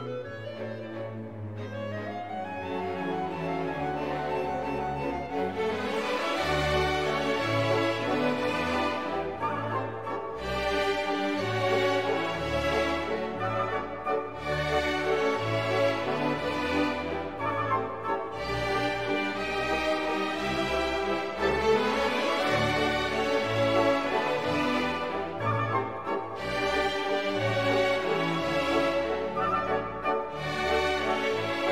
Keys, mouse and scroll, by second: 0.0 click, 0.7 click, 3.0 click, 4.3 click, 5.0 click, 6.1-6.6 scroll down 1, 7.8 scroll up 1, 8.3-8.6 scroll down 2, 11.1 scroll up 2, 11.8 scroll up 2, 12.7 scroll up 2, 14.4 click, 15.2 click, 17.5 click, 23.4 click, 23.9 click, 25.3-26.8 typing, 27.2 click, 29.1 0, 30.3 click.